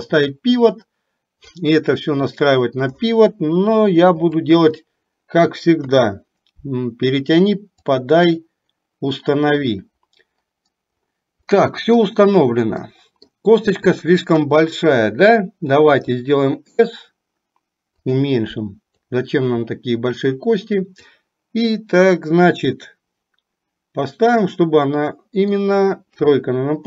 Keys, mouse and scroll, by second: 4.2 KP_7, 6.0 KP_3, 8.1 click, 8.7-9.8 drag, 11.6 middle click, 13.0 middle click, 14.5 KP_1, 16.1 s, 19.2-21.2 drag, 22.8-25.6 middle drag, 26.2 KP_3.